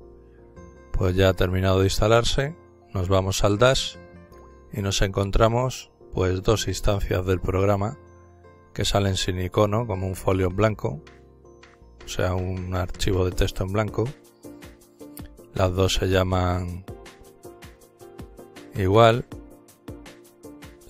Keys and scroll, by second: 0.0-0.8 typing, 1.2 Return.